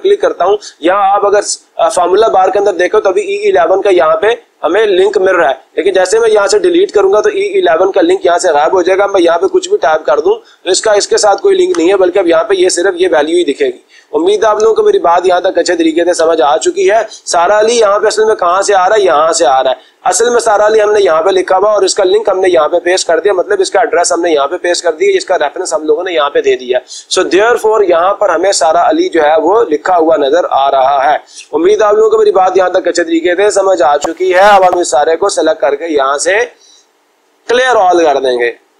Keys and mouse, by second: 6.7 Delete, 9.3-10.7 typing, 11.9 Return, 13.4-14.4 drag, 14.9 ctrl+z, 19.7-20.7 drag, 23.2-24.3 drag, 35.5 click, 38.2 click.